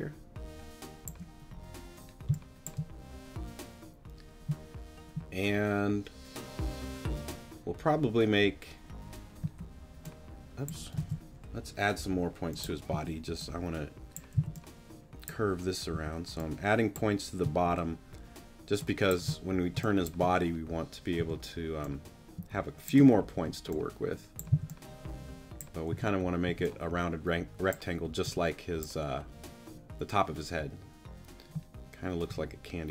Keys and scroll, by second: 9.4 a, 11.0 super+z, 12.9 a, 14.3 c, 15.9 a, 17.4 space, 19.7 space, 21.2 t, 23.3 shift+t, 24.0 t, 24.5 c, 25.9 t, 28.2 t, 32.3 t.